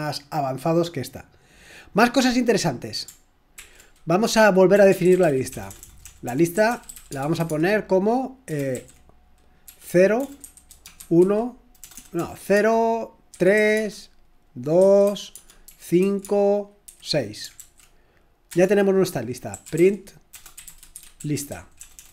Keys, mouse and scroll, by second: 3.6 ctrl+l, 4.5-22.1 typing.